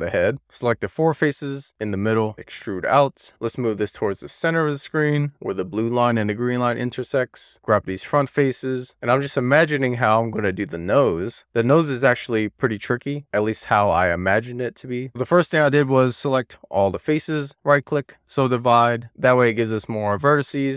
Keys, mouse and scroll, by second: 0.3 click, 1.2 shift+click, 1.9 shift+click, 2.2 d, 2.9 click, 3.6 Tab, 4.4 click, 7.7 click, 8.6 middle click, 9.1-9.9 scroll down 6, 9.9-11.5 middle drag, 11.7 shift+middle click, 12.4-12.8 scroll up 1, 12.8 scroll down 1, 13.1-15.3 middle drag, 15.6 shift+click, 16.1 shift+click, 17.4 shift+click, 18.1-19.7 right drag, 19.7-20.7 middle drag.